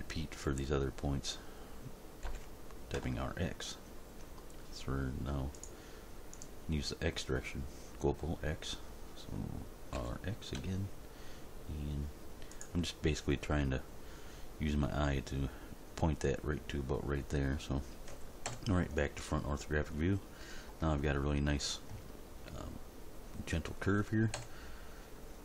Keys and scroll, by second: 2.3 r, 3.0 x, 9.9 r, 10.5 x, 18.5 End, 24.3 End.